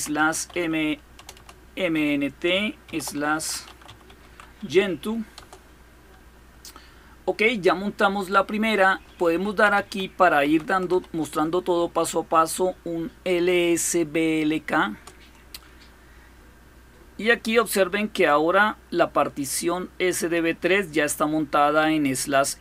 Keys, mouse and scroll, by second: 0.0-4.0 typing, 5.2 Return, 9.1-11.2 typing, 14.7 Return, 18.0-20.5 drag.